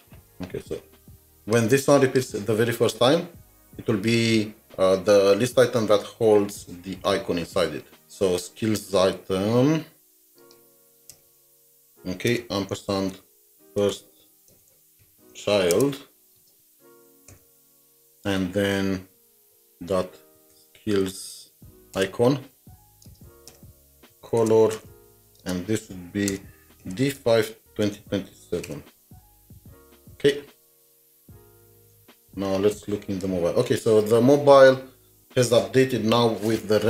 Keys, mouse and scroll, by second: 11.1 typing, 11.2 Return, 11.3 Return, 12.3-16.4 typing, 20.3-21.0 typing, 22.0 Return, 22.6 Right, 22.8 Left, 23.1 space, 23.3 Right, 23.5 Return, 24.1 Return, 24.4-25.2 typing, 26.3-29.0 typing, 30.2 alt+Tab, 31.9 alt+shift+Tab.